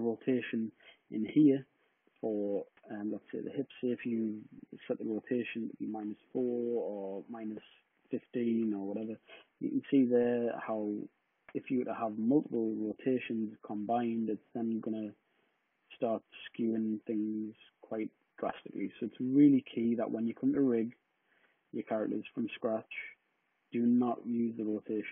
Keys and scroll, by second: 4.4 -, 5.1 4, 5.7 Return, 7.8-8.7 typing.